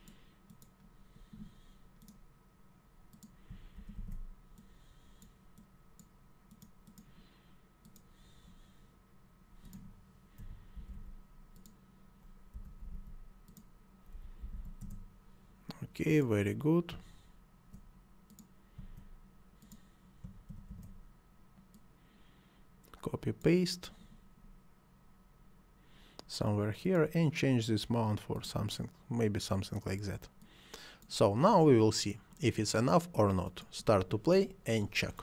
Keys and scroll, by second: 3.7 ctrl+c, 3.9 ctrl+v, 10.3 ., 10.7 1, 10.9 5, 12.5-14.5 typing, 14.8 Return, 20.5 ctrl+c, 20.7 ctrl+v.